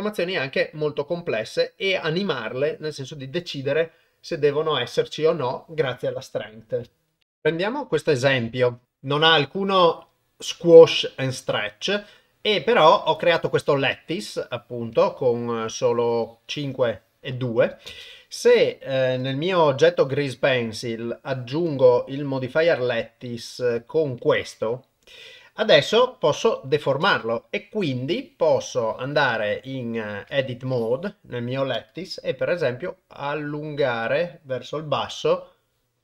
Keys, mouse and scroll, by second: 17.9 shift+space, 21.8-22.6 drag, 26.4 shift+Left, 30.3 Tab, 30.9 click, 32.6 g.